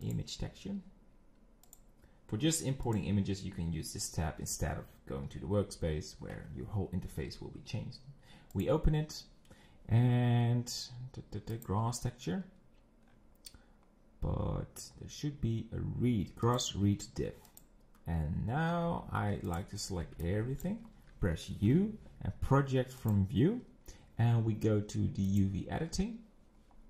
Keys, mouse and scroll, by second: 2.9-5.2 drag, 8.7 click, 18.7 Tab, 19.5 click, 19.8 scroll down 5, 20.1 b, 20.8-21.7 scroll up 3, 23.2 u, 25.4 click.